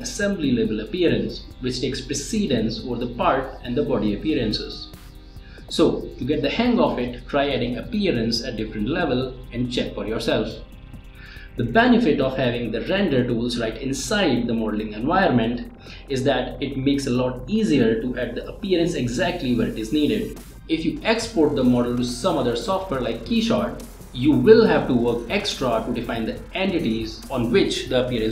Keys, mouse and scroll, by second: 4.7-6.8 drag, 5.3 typing, 18.0 click, 18.2 space, 21.7-24.2 middle drag, 26.0-28.1 middle drag.